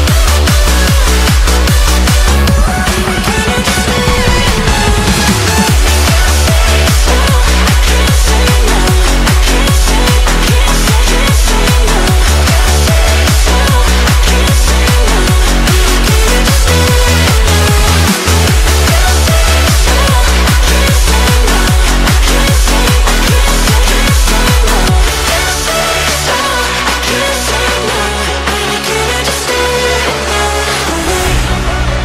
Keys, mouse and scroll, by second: 0.1-0.7 scroll down 2, 0.7 r, 2.8 middle click, 3.4 g, 4.3 g, 5.6-6.2 middle drag, 6.2 g, 7.2-7.7 middle drag, 7.7-8.1 scroll up 1, 8.1-8.4 middle drag, 8.4-8.8 scroll down 2, 8.8 r, 11.2-12.8 middle drag, 12.8 r, 14.7 middle click, 15.3 KP_1, 15.9 click, 16.4-17.4 shift+middle drag, 17.4 click, 18.0-20.6 middle drag, 20.6 click, 20.9 shift+middle click, 21.5 shift+d, 22.3-23.4 middle drag, 23.4 r, 24.5-25.6 middle drag, 25.6 click, 26.3 shift+d, 27.9-28.3 middle drag, 28.3 scroll up 3, 28.6-29.5 shift+middle drag, 29.5 r, 31.8-32.0 middle drag.